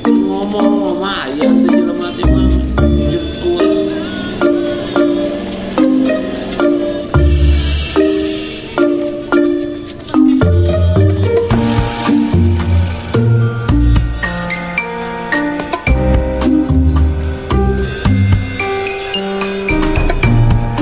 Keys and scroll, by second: 0.5 Escape, 12.4 Return.